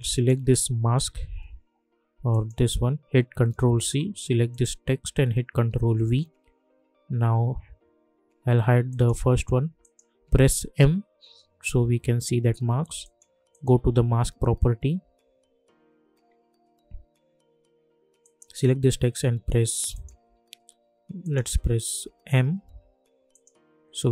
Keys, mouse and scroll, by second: 2.3 click, 3.7 ctrl+c, 4.5 click, 5.8 ctrl+v, 8.8 click, 10.7 m, 13.0 click, 18.2 click, 19.1 m, 19.9 click, 20.2 m, 21.2 click, 21.5 m, 22.0 m, 23.3 click.